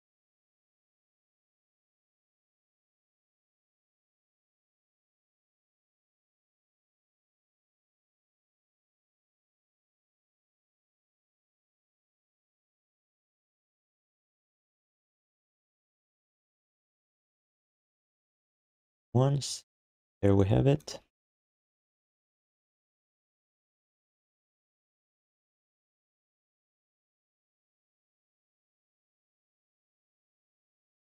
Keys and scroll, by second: 2.3 r, 4.8 q, 6.2 q, 9.6 3, 10.6 1, 12.7 q, 13.3 alt+shift+d, 14.1 3, 15.4 1, 15.6 1, 17.6 q, 18.5 alt+shift+d, 18.8 ctrl+s, 19.5 w, 21.0 x, 28.5-30.7 typing.